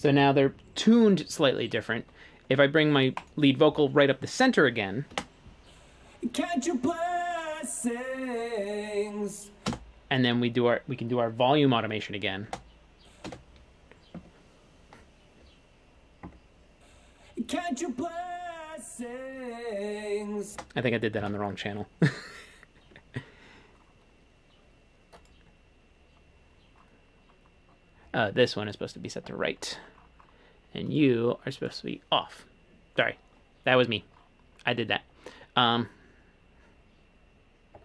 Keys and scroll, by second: 5.2 space, 9.8 space, 12.6 space, 13.4 space, 20.6 space, 21.3 super+z.